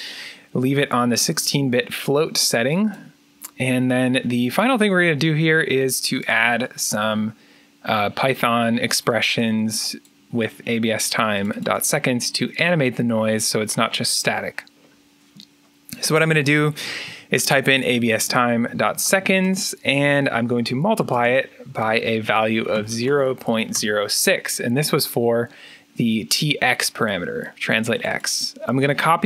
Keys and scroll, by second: 16.3-23.4 typing, 23.7 Return, 25.3-26.0 typing, 29.1-29.2 typing.